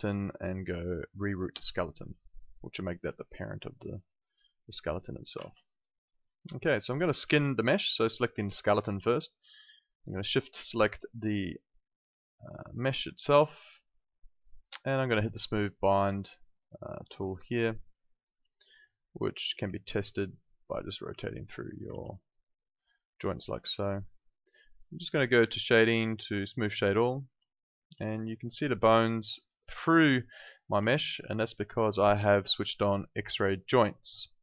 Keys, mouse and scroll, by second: 2.2 alt+click, 2.8 alt+right click, 3.2 alt+middle click, 3.4 alt+right click, 3.6 alt+click, 5.5 z, 5.6 alt+click, 6.0 alt+middle click, 6.3 alt+right click, 6.6 alt+click, 7.3 alt+click, 8.6 alt+right click, 10.6 shift+click, 11.7 alt+click, 17.2 click, 18.0 alt+click, 19.5 e, 20.6 click, 22.0 z, 22.2 alt+right click, 22.4 alt+click, 22.7 alt+middle click, 22.9 alt+right click, 23.4 alt+click, 27.5 alt+click, 30.4 alt+click.